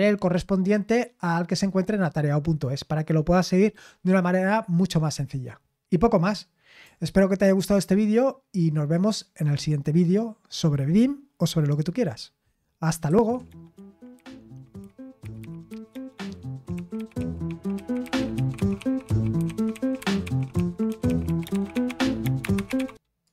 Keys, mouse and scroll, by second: 13.0 super+x, 23.2 click.